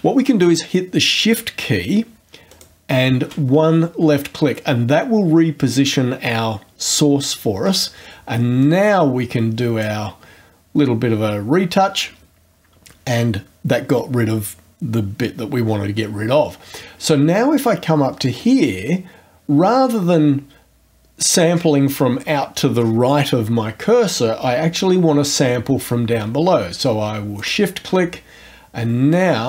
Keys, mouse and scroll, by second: 2.5 shift+click, 8.6-10.0 drag, 27.4 shift+click, 29.1-29.4 drag.